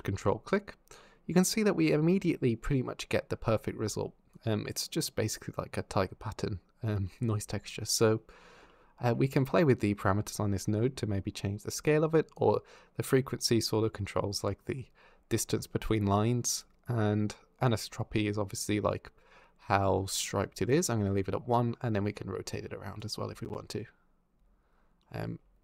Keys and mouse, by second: 4.1 click, 9.2-11.0 shift+drag, 11.4 shift+click, 12.2-16.4 shift+drag, 17.6-20.5 drag, 21.3-22.8 drag, 23.7 ctrl+z.